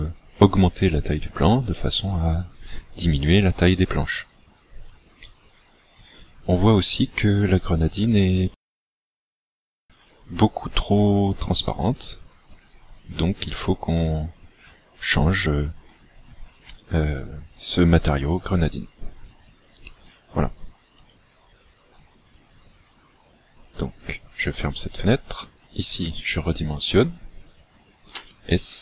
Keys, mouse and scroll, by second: 28.2 s.